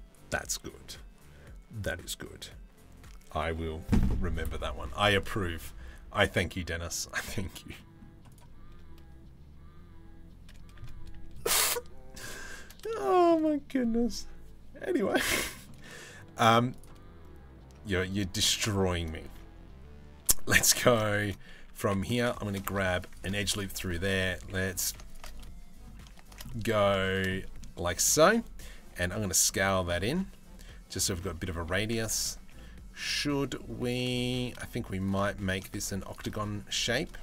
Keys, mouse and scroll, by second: 6.4-6.8 middle drag, 7.3 middle drag, 12.6 shift+middle click, 15.1 shift+middle click, 15.4 middle click, 17.6-18.0 middle drag, 18.2 shift+middle click, 18.4 middle click, 18.8 Tab, 20.7 shift+middle click, 21.2 2, 22.0 shift+middle click, 22.4 ctrl+r, 23.1 2, 24.9 middle click, 26.0 middle click, 26.9 middle click, 27.5 middle click, 28.4 s, 29.6 Tab, 29.7-30.7 middle drag, 30.9 Tab, 31.3 2, 32.1 middle click, 33.7 middle click, 34.8 middle click, 35.9 middle click, 36.8 middle click.